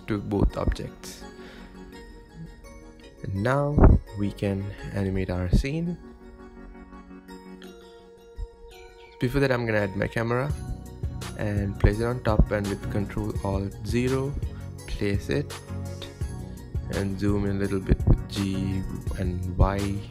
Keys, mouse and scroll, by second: 0.4-1.1 shift+middle drag, 1.1-1.8 scroll down 2, 1.8-6.1 shift+middle drag, 6.1 shift+a, 8.7 scroll down 4, 9.3-9.9 scroll up 1, 9.9 g, 11.8 ctrl+alt+KP_0, 12.8 click, 13.6 g, 16.0 g, 19.1 g.